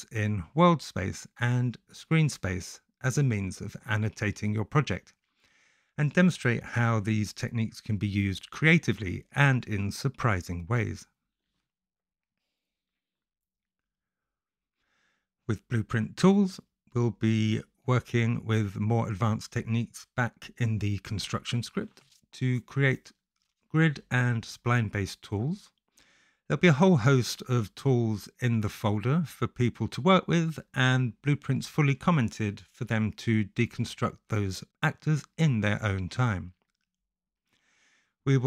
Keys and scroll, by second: 1.4 space, 2.8 w, 3.8 s, 24.8 Return, 25.0-27.5 typing, 28.6 u, 29.0 t, 29.4 Return, 29.7 t, 31.3 -, 32.8 e, 33.3 Return, 34.7 g, 35.3 shift+s, 37.2 Return.